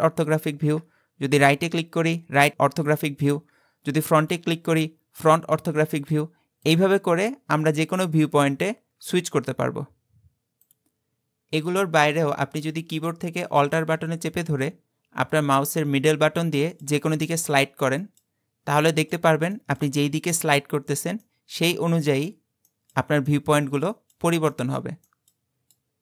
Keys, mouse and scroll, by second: 0.7 `, 3.4 `, 7.2 `, 8.3 `, 16.5 alt+middle click, 17.3 alt+middle click, 18.0 alt+middle click, 18.9 alt+middle click, 19.5 alt+middle click, 20.3 alt+middle click, 21.2 alt+middle click, 22.0 alt+middle click, 23.3 alt+middle click, 24.0 alt+middle click.